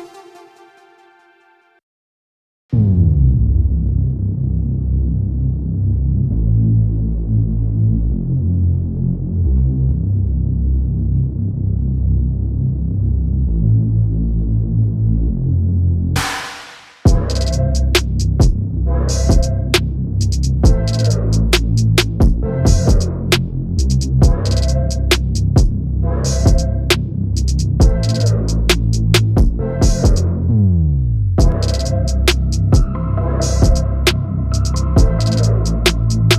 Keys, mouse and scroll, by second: 2.6 click, 4.8 ctrl+shift+g, 5.6 click, 7.0 shift+click, 9.3-10.8 drag, 11.8-14.2 drag, 14.2 click, 14.4 shift+click, 15.8 click, 29.2 ctrl+scroll, 30.2 click, 34.2 Down, 34.7 Down.